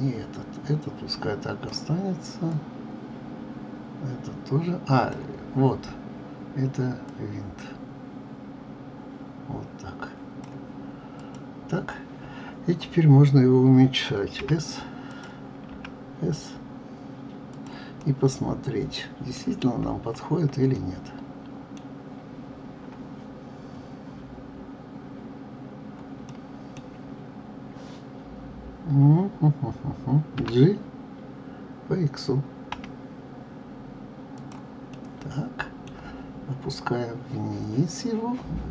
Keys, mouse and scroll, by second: 2.5-5.5 drag, 7.1-10.2 drag, 11.1 click, 15.1 click, 15.7 s, 18.0-19.7 middle drag, 19.7-20.7 scroll up 8, 20.7-23.7 middle drag, 26.3-29.2 middle drag, 30.4 g, 34.9-37.9 middle drag.